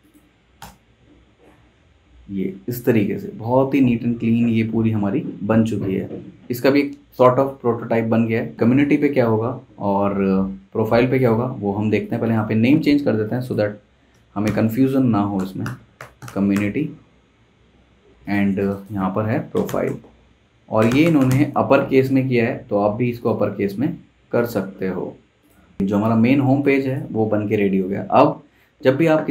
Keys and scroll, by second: 0.6 super+Return, 14.4-17.0 typing, 18.1 Escape, 19.3-21.7 typing, 25.8 super+s, 27.2 super+s.